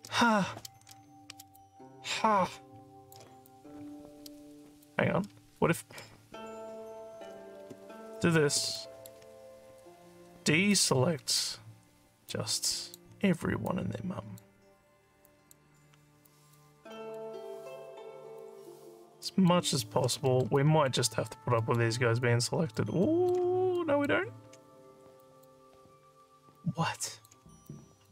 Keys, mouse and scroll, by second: 1.6-3.1 alt+drag, 3.5-4.9 drag, 7.6 ctrl+z, 8.8 alt+middle click, 10.7 ctrl+click, 12.3 ctrl+click, 13.7 ctrl+click, 15.3 ctrl+click, 16.3 ctrl+click, 17.0 ctrl+click, 18.4 ctrl+click, 19.3 ctrl+click, 20.3 alt+middle click, 20.6 alt+click, 21.6 alt+middle click, 22.4 alt+click, 23.1 alt+middle click, 23.7 ctrl+click, 25.2 ctrl+click, 26.6 alt+click, 27.7 ctrl+click.